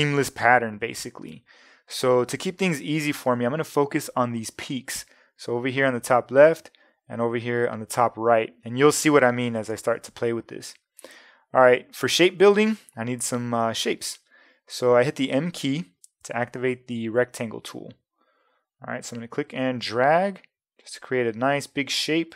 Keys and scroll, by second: 9.7 super+-, 11.0 space, 13.7 m.